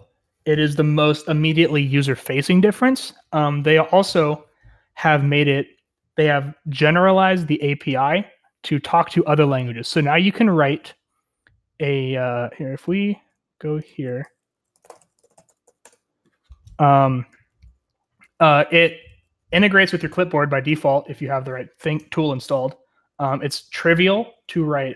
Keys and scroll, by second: 16.5 Return, 16.5 typing, 18.0-18.9 j, 19.1 j, 22.2-24.1 j.